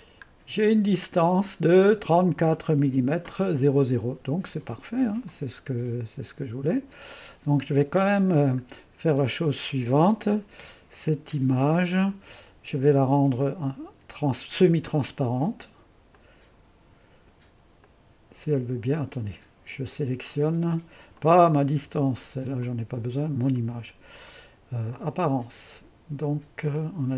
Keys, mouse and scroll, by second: 5.3-6.6 drag, 6.7 click, 7.7 middle click, 9.7-11.2 drag, 11.3-12.8 drag, 13.7-14.9 drag, 16.1-17.7 drag, 17.9-21.3 drag, 21.9 Delete, 22.6 click, 23.8 click, 24.9 click.